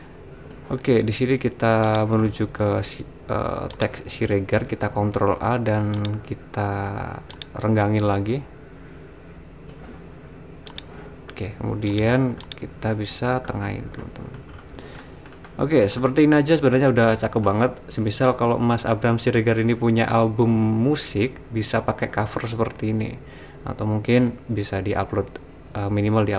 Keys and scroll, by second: 4.8 super+a.